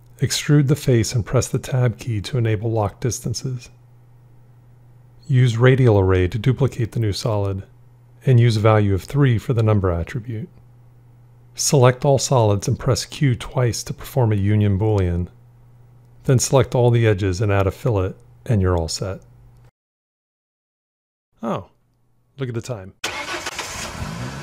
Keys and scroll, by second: 3.1 Tab, 12.9 q, 13.2 q.